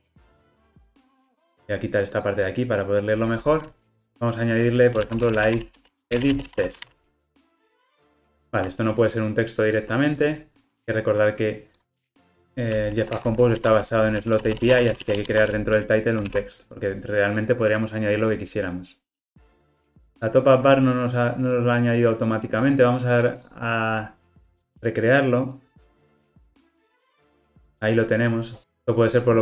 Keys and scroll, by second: 13.1 super+x, 16.2 super+x, 16.5 super+v, 23.4 ctrl+r.